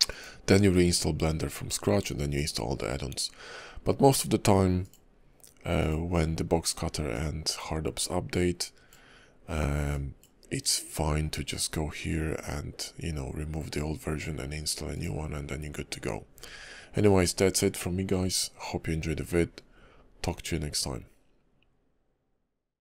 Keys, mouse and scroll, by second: 4.8 click.